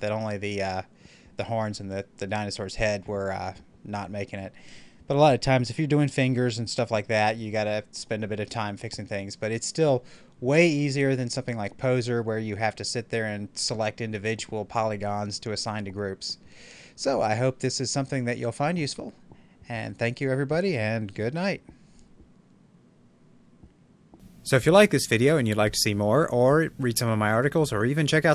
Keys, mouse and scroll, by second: 8.3-11.0 middle drag, 11.0-11.9 scroll up 1, 11.9-14.7 middle drag, 14.7 scroll up 1, 15.4 scroll down 1, 17.7-20.7 shift+middle drag.